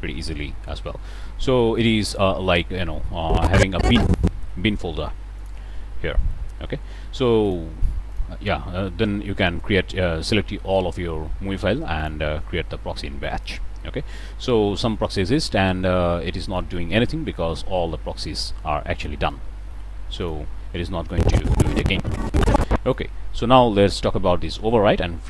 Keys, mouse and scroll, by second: 0.3 g, 1.7 click, 2.2 middle click, 2.5 click, 2.6 middle drag, 3.1-4.3 drag, 5.3 click, 7.4 shift+click, 8.0 shift+click, 11.9 click, 13.4 click, 16.4 click, 17.8-20.2 middle drag, 17.8-18.9 scroll down 1, 20.2 click, 23.2-23.6 middle drag.